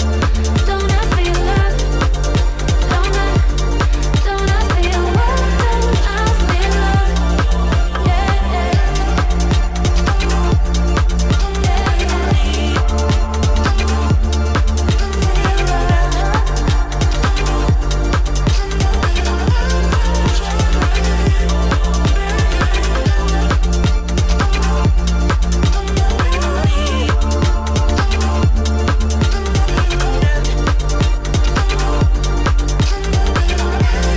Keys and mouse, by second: 0.1 s, 2.3 alt+click, 3.1 g, 5.1 `, 6.4 z, 7.6 z, 8.4 click, 8.9 click, 9.8 click, 10.7 click, 12.0 click, 12.6 click, 12.9 g, 13.9 click, 14.2 g, 16.7 shift+click, 17.6-19.0 drag, 20.0 3, 20.2 click, 20.5 shift+click, 20.9 `, 22.1-23.2 drag, 25.4 click, 26.1 Tab, 26.7 Tab, 27.1 1, 27.3 click, 27.8 click, 28.7-30.9 drag, 31.3 click, 32.2 click, 33.2 shift+click, 33.8 click.